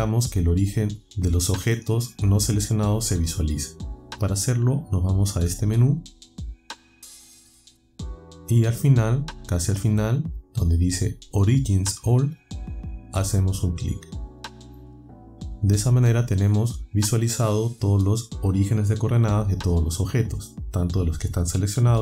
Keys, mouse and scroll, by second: 6.8 click, 14.3 click.